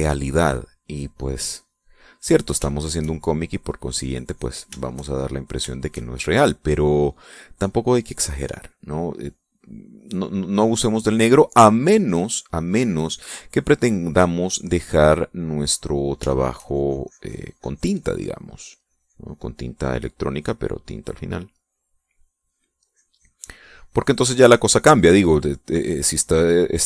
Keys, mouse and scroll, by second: 0.9-2.6 drag, 2.8-5.5 shift+drag, 5.6-9.5 shift+drag, 9.7-12.0 drag, 12.6-13.7 drag, 14.8-20.2 drag, 21.2 click, 22.1 click, 23.3-25.2 drag, 25.6 middle click, 26.2 middle click.